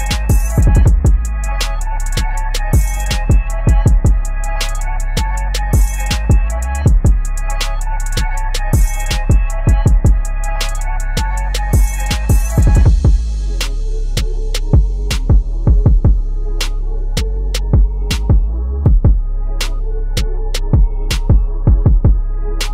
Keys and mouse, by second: 0.7 v, 1.2 ctrl+click, 10.8 ctrl+], 12.6-15.4 drag, 15.4 ctrl+a, 15.8 click, 16.2 ctrl+d, 17.9 ctrl+click.